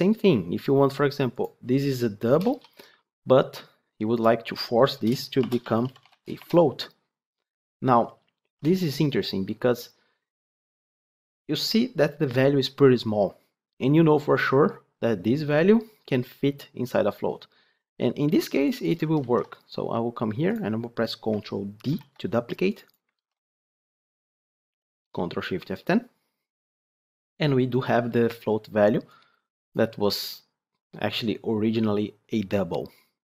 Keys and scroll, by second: 19.1 ctrl+c, 21.7 ctrl+d, 23.1 ctrl+v, 24.6 ctrl+shift+F10.